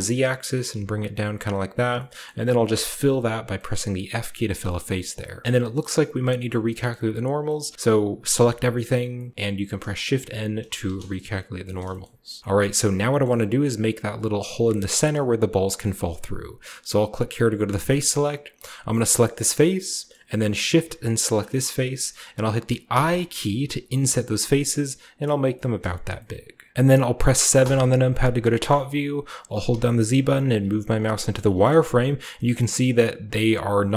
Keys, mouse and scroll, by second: 0.0 middle click, 0.0-1.5 scroll down 1, 0.4 typing, 1.5 click, 1.8-2.6 scroll down 1, 2.6 click, 2.6 typing, 4.5 shift+middle click, 4.7 shift+middle click, 5.0 middle click, 5.1-5.4 scroll up 1, 5.4 middle click, 6.4 middle click, 6.8 middle click, 7.0-8.2 scroll down 1, 7.6-8.6 middle drag, 8.2 typing, 9.3 middle click, 10.8 typing, 11.4 middle click, 11.4-11.9 scroll down 1, 11.7 shift+middle click, 11.9-14.6 shift+scroll up 1, 12.0 shift+middle click, 12.3 shift+middle click, 12.5 middle click, 13.2-14.6 middle drag, 17.5 click, 19.2-20.0 scroll down 2, 20.0-21.3 shift+middle drag, 21.2 shift+right click, 21.7-22.8 scroll up 2, 22.8-25.0 scroll up 1, 22.8 i, 25.3 click, 26.7 w, 26.7 🔈, 27.5 KP_7, 28.6-29.6 shift+middle drag, 29.6-30.3 typing, 31.3-33.5 shift+middle drag, 31.5-33.5 shift+scroll up 1.